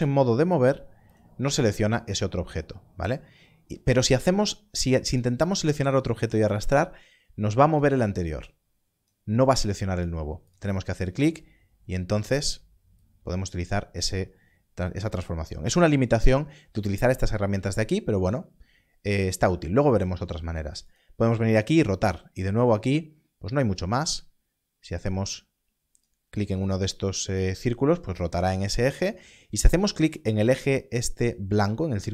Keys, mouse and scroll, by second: 3.9 click, 20.8 click, 26.0 click.